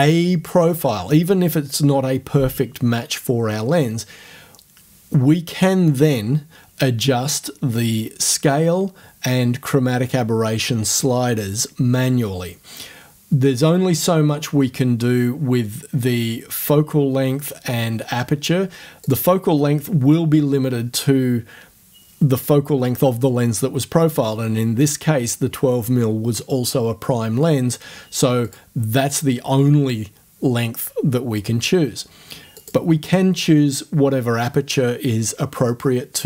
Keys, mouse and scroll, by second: 19.0 click, 28.5 click, 29.1 click, 32.6 click, 32.9-33.4 scroll up 1, 33.4 scroll up 1, 33.6-36.2 middle drag.